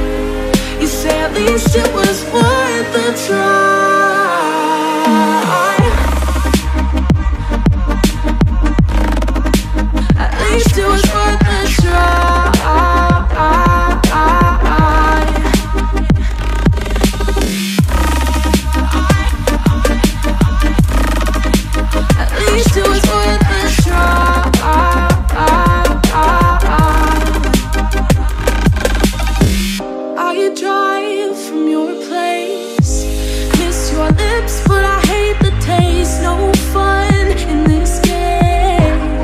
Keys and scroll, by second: 3.0 ctrl+z, 5.1 p, 9.3 p, 9.6 ctrl+=, 31.5 ctrl+=, 32.6 ctrl+-, 37.1 p.